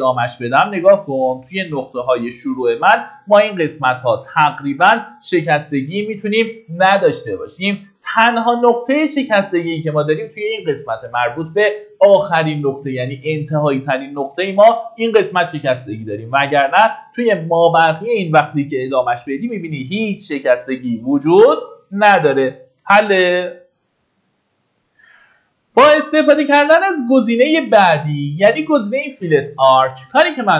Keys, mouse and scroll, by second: 7.2 Escape, 8.5 middle click, 21.4-23.2 typing.